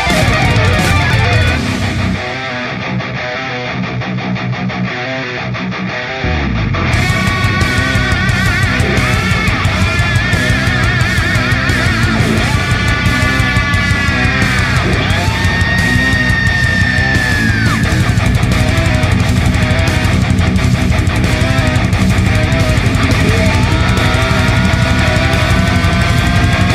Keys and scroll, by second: 4.6 Delete, 5.2 space, 12.6 ctrl+alt+space, 13.1 ctrl+alt+space, 13.6 space, 15.9 ctrl+alt+space, 16.4-17.1 ctrl+alt+space.